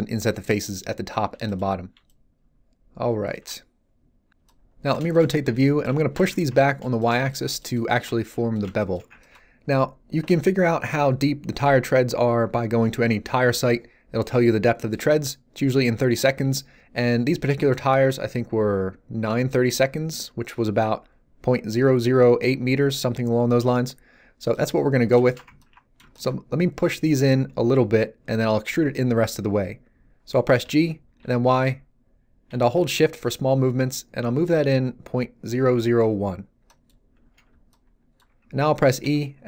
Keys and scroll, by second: 5.3 z, 30.6 g, 31.2 y, 39.0 e.